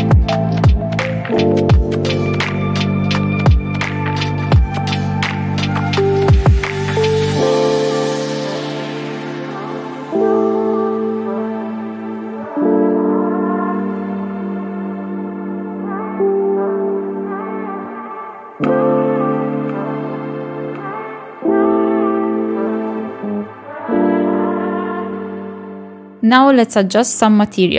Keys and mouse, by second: 0.1 g, 0.8 shift+middle click, 1.2 click, 2.2 shift+middle click, 2.4 g, 2.9 r, 3.2 r, 3.7 shift+middle click, 4.0 shift+middle click, 4.3 g, 5.8 KP_0, 5.9 click, 10.3 KP_Decimal, 10.6 click, 11.3 click, 11.8 r, 12.9 KP_7, 13.3 middle click, 13.4 KP_7, 13.9 g, 15.1 shift+middle click, 15.4 click, 15.8 middle click, 16.1-16.5 drag, 16.6 shift+middle click, 16.8 KP_Decimal, 17.0 middle drag, 17.5-17.9 drag, 18.0 middle click, 18.5-18.9 drag, 18.9 middle click, 19.3 KP_0, 20.3 click, 20.7 o, 21.5 shift+middle click, 22.0 click, 22.1 KP_Decimal, 25.0 middle click, 25.7 KP_0.